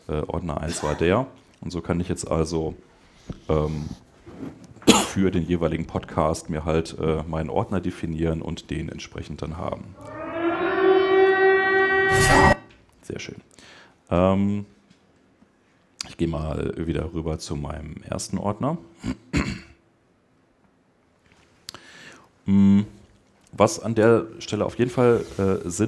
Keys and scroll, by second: 0.4 super+Up, 0.9 super+Tab.